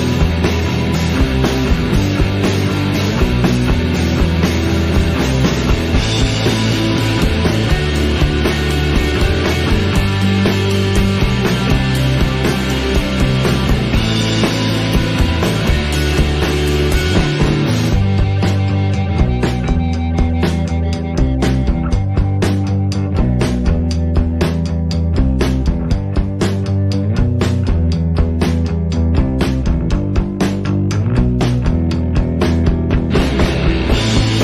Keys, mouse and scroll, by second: 0.2 Tab, 1.9 click, 2.3 Delete, 3.0 middle click, 3.8 scroll up 1, 3.9 Tab, 4.1 click, 4.4 Tab, 4.6 click, 4.8 scroll down 3, 5.0 middle click, 5.4 shift+click, 5.8 Delete, 6.3-7.5 scroll up 2, 6.3 middle click, 7.5 KP_3, 8.0 middle click, 8.4 Tab, 8.6 click, 9.0 KP_3, 9.3 z, 10.1-10.5 scroll up 4, 10.5-10.9 shift+middle drag, 10.9-11.8 scroll up 2, 11.8 Tab, 12.0 a, 12.3 s, 14.7 s, 16.3 s, 17.4-17.7 scroll down 4, 17.7 scroll up 1, 18.0 s, 19.0 middle click, 19.4 Tab, 19.6 z, 20.1 scroll down 1, 20.3 shift+middle drag, 20.6 shift+click, 21.0 KP_1, 21.4 s, 23.1-23.5 scroll up 1, 23.5 click, 24.9 alt+a, 25.0 scroll down 1, 25.2-25.9 scroll up 3, 25.4 shift+middle click, 25.9 click, 26.1 shift+click, 26.3 scroll up 1, 26.5 shift+middle click, 26.9-27.4 scroll up 7, 27.4 g, 28.1-28.4 scroll down 12, 28.4-28.9 middle drag, 28.9 scroll down 2, 29.0-30.2 middle drag, 30.3 shift+middle drag, 30.4 scroll up 4, 30.6 alt+a, 30.8 shift+middle click, 31.6-32.0 scroll down 1, 32.6 KP_1, 32.9 shift+a, 34.3-34.4 scroll down 10.